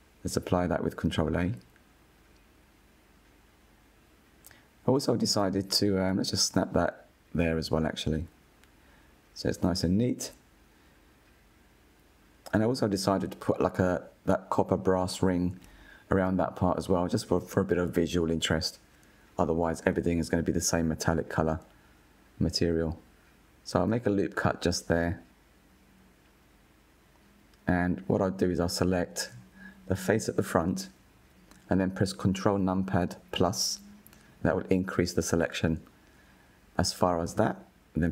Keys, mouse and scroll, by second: 0.6 ctrl+a, 2.1-3.1 middle drag, 3.1 KP_1, 3.9-4.4 scroll up 3, 4.4-5.4 shift+middle drag, 5.4-7.7 drag, 10.1 scroll down 2, 10.8 click, 11.2 scroll down 2, 11.6-13.5 middle drag, 13.5 KP_1, 15.0 click, 15.7-16.8 scroll up 3, 16.8 click, 18.1 Tab, 19.7 ctrl+r, 24.3 middle click, 25.0-25.6 scroll down 1, 25.6 z, 27.1 click, 27.6-28.8 middle drag, 28.8-31.3 scroll up 3, 31.3 3, 31.7 middle click, 32.7 click, 34.3 ctrl+KP_Add, 35.1 ctrl+KP_Add, 35.5 ctrl+KP_Add, 35.8 ctrl+KP_Add, 36.3 ctrl+KP_Add.